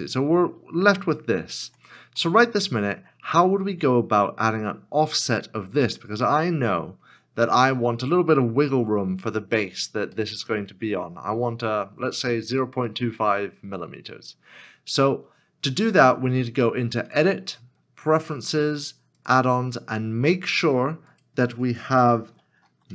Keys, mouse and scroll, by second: 1.6 Tab, 2.3 middle click, 2.8 scroll up 1, 6.1 scroll up 1, 6.3 middle click, 6.6 scroll down 1, 10.1 scroll down 1, 10.3 middle click, 11.7 scroll up 1, 12.6 middle click.